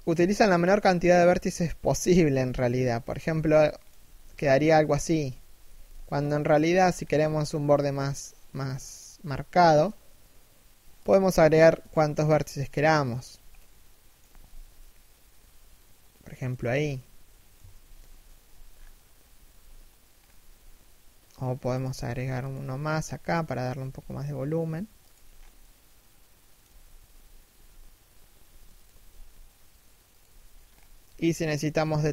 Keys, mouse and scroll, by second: 2.6-6.6 typing, 3.1 middle click, 5.5 middle click, 6.3-6.6 scroll up 1, 8.1 k, 10.6 a, 11.4 k, 13.1 middle click, 14.1 z, 14.4 middle click, 16.1 z, 16.6 middle click, 17.2 KP_3, 17.6 KP_1, 18.3-19.1 scroll down 1, 19.1 scroll up 1, 19.5 scroll down 1, 19.7 scroll up 1, 21.1 k, 23.4 s, 25.0 scroll down 1, 25.1 middle click, 26.2 3, 26.6 1, 28.4 alt+shift+right click, 28.6 g, 30.2-30.6 scroll up 1, 31.2 a, 31.9 k.